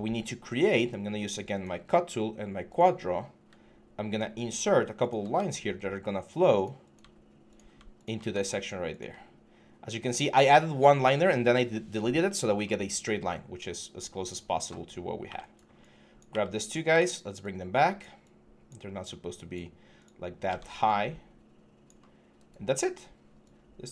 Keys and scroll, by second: 15.0 q, 16.7 typing, 20.3 ctrl+z.